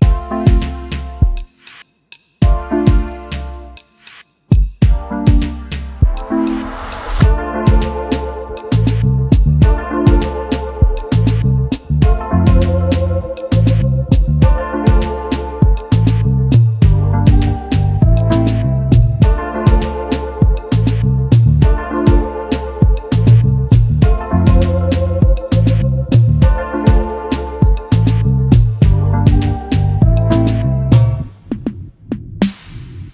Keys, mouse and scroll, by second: 4.4-5.0 typing, 6.7-7.6 typing, 8.2 double click, 8.9-9.5 typing, 10.5 double click, 11.7-12.6 typing, 21.3 ctrl+g, 26.7 right click, 28.2 double click.